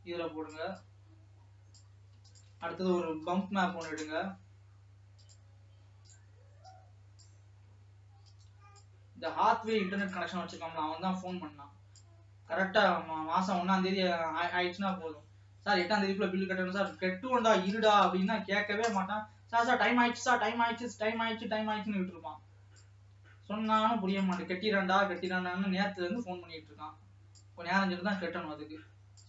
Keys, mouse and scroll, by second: 0.1 click, 1.8-6.4 drag, 7.2-12.3 drag, 14.1-15.3 middle drag, 15.3-21.4 drag, 21.4 middle click, 22.3-23.8 drag.